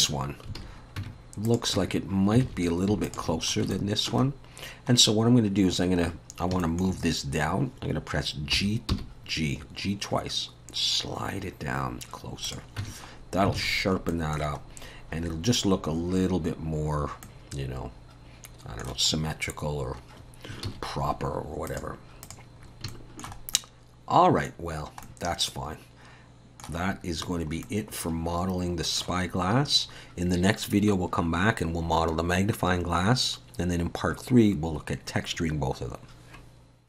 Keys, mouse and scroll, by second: 0.6 alt+a, 1.0 Tab, 1.5 click, 1.8 Tab, 2.4 alt+a, 3.1 alt+shift+click, 3.5 scroll up 2, 3.7 shift+middle click, 4.3 scroll down 1, 5.3 scroll up 1, 6.3 scroll down 1, 6.6 shift+middle click, 8.5 g, 12.8 Tab, 13.2 scroll down 2, 13.6 alt+a, 14.1 middle click, 14.7 scroll up 1, 16.3-17.1 scroll down 4, 17.2 middle click, 19.1-19.7 scroll up 2, 19.7 scroll down 2, 20.7 ctrl+s, 21.7 click, 22.2 click, 22.7 scroll up 1, 22.9 shift+middle click, 23.5 middle click, 24.6-25.0 scroll down 3, 25.0 middle click, 26.9-27.3 scroll up 1, 27.3-27.8 scroll down 3, 27.6 middle click, 29.2-29.9 scroll up 2, 29.9-30.5 scroll up 1, 30.5 scroll up 1.